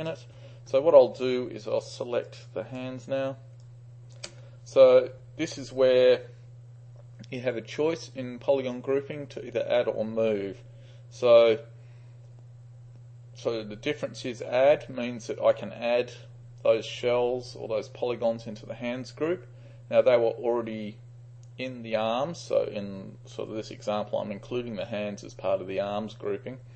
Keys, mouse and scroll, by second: 0.0 click, 2.3-2.8 shift+drag, 3.6-4.2 shift+drag.